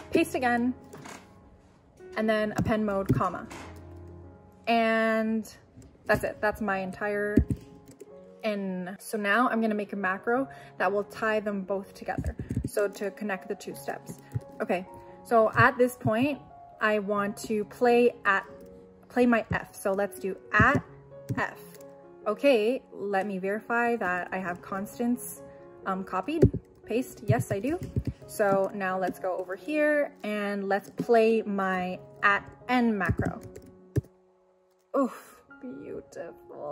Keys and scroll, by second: 0.2 p, 2.6 a, 3.1 ,, 7.3 Escape, 20.6 shift+2, 21.3 shift+f, 21.8 f, 26.4 p, 27.3 u, 27.9 ⟲, 29.1 ctrl+l, 33.1 shift+2, 34.0 shift+n.